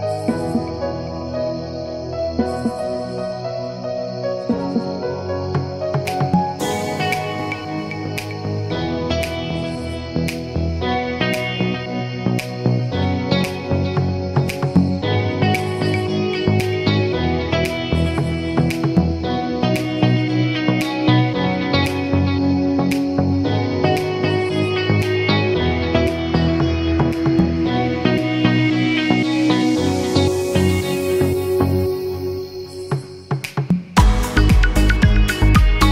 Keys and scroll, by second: 9.9 0, 10.7 Return.